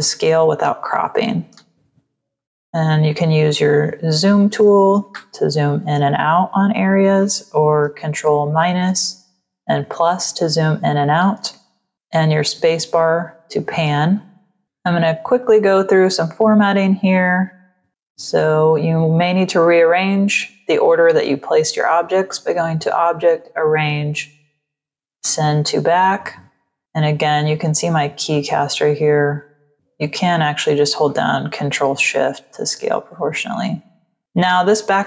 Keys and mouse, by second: 0.7 click, 2.3 ctrl+alt+shift+click, 5.1 z, 6.4 click, 8.2 ctrl+-, 9.4 ctrl+=, 10.3 ctrl+-, 11.9 space, 12.2 click, 15.3 click, 18.3 click, 25.1 click, 31.0 ctrl+shift+click, 34.2 click.